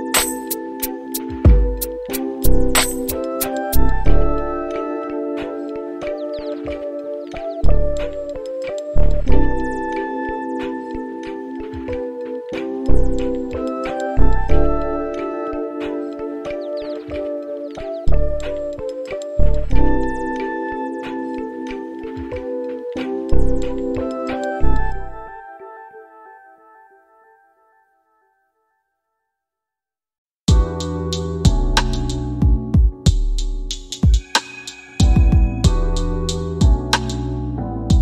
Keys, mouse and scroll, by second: 2.0 r, 12.3-15.8 right drag, 16.6-23.6 drag, 26.8 click, 29.0 click, 30.3 click, 32.2-32.6 scroll down 3, 33.2 click, 37.0 click.